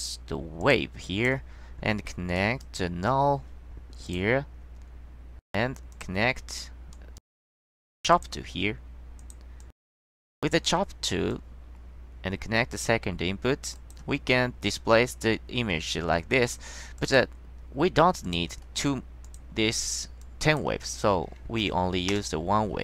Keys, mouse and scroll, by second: 0.7 click, 1.2 click, 2.5 click, 4.2 click, 6.1 click, 7.1 click, 7.8 click, 8.3 click, 9.3 click, 9.7-10.1 drag, 11.4-12.9 drag, 13.9 click, 17.1 click, 18.4 click, 19.4 click, 20.3-20.8 drag, 21.7 KP_1, 22.2 Return.